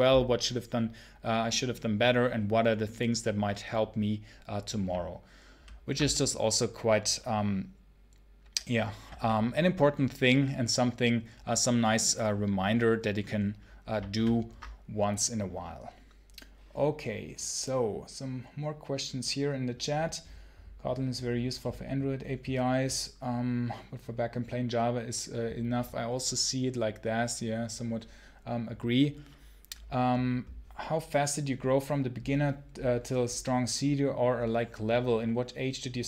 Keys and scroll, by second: 5.4 ctrl+super+h.